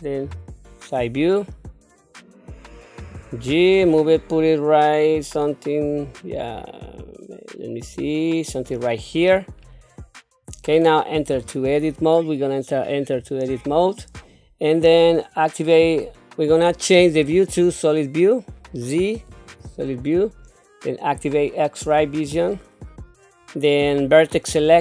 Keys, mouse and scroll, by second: 0.2 KP_3, 3.0 g, 9.6-10.0 scroll up 4, 10.5 scroll down 1, 11.3 Tab, 17.6 z, 22.0 q.